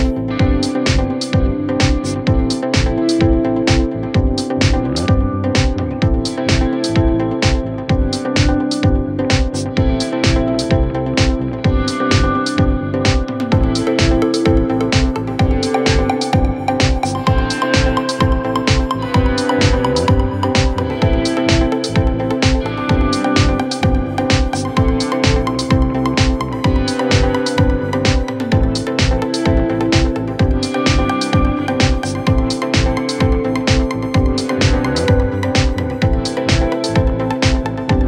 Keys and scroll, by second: 8.1 Escape, 9.3 Delete, 9.9 F3.